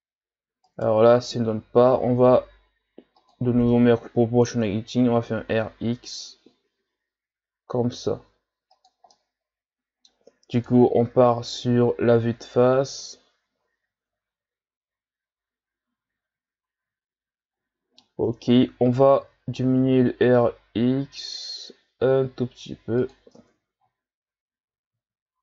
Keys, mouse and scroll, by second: 3.2 click, 5.1 r, 9.2-10.7 middle drag, 10.7 KP_1, 12.2-12.9 scroll down 2, 12.9 Tab, 13.7 a, 14.2-15.3 scroll down 3, 15.7-16.6 scroll up 4, 17.7-18.2 shift+scroll up 3, 18.2 Tab, 19.2 r, 23.3 Tab, 23.9-24.6 scroll down 5, 25.0-25.4 scroll down 1.